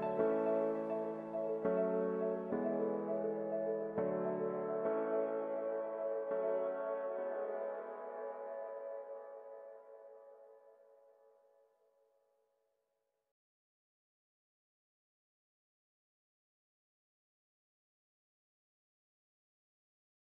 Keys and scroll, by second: 8.7 ctrl+d.